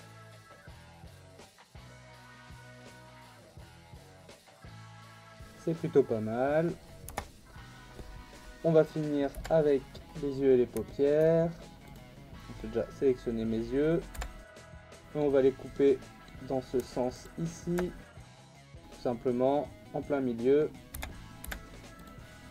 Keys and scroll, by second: 1.6 ctrl+e, 2.3 a, 2.8 u, 7.1 Tab, 9.3 /, 14.1 /, 14.7 Tab, 18.2 ctrl+e, 20.9 a, 21.4 u.